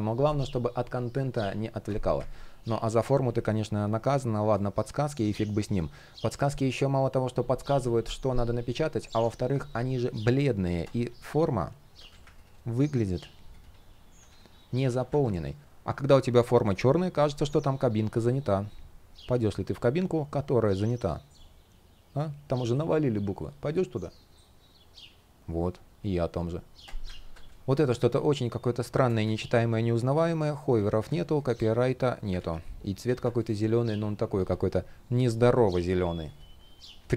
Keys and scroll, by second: 3.0 shift+p, 4.8 super+z, 27.6 super+z, 28.9 super+z, 30.7 super+z, 32.0 super+z.